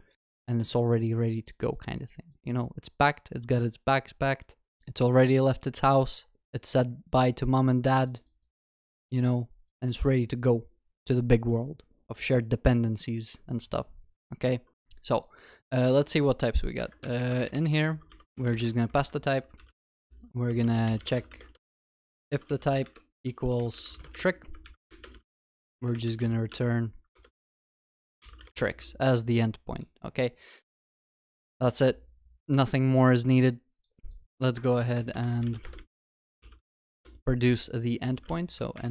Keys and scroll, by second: 15.7 Tab, 26.5 Tab, 30.8 ctrl+alt+shift+l, 31.2 ctrl+s.